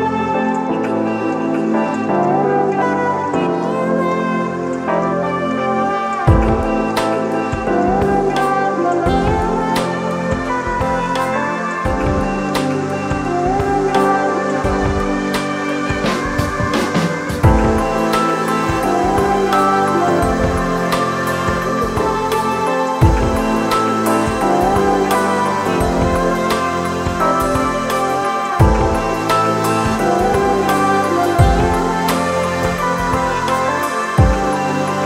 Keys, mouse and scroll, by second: 5.9 alt+shift+click, 15.4 ctrl+click, 27.0 ctrl+click, 33.1 ctrl+click.